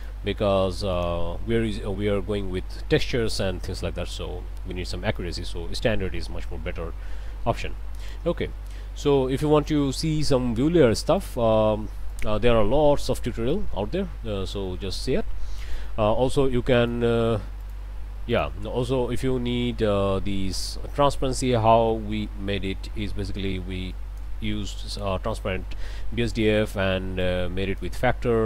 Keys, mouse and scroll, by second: 0.0 click, 1.0 click, 5.2-8.3 drag, 11.2 click, 12.1 click, 15.8 click, 16.8 click, 17.6 click, 18.3 click, 21.2 scroll up 2, 21.7 middle click, 22.1 scroll down 2, 22.5 middle click, 23.9 click, 24.5 middle click, 26.3 middle click, 27.2 click.